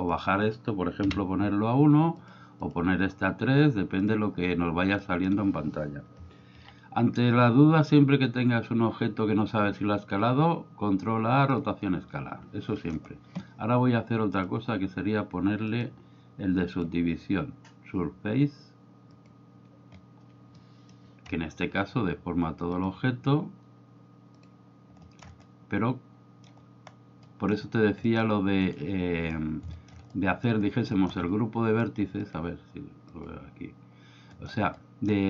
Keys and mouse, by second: 0.0-2.2 drag, 2.6-4.1 drag, 5.0 middle click, 6.5 ctrl+a, 12.8 middle click, 15.7-16.9 drag, 19.2 click, 20.6 middle click, 22.8-24.4 drag, 25.0 shift+middle click, 25.4-26.5 middle drag, 27.2 middle click, 28.0 middle click, 28.7 right click, 29.8 shift+middle click, 30.1 middle click, 31.0 shift+middle click, 32.4-33.3 drag, 34.4 shift+middle drag, 34.7 middle click.